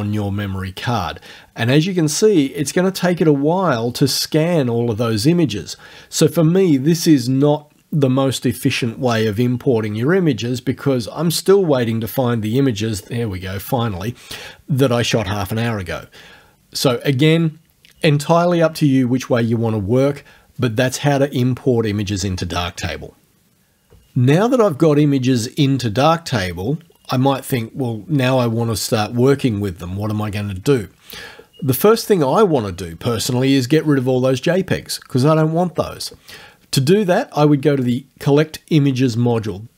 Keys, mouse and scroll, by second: 17.4 click, 37.8 click.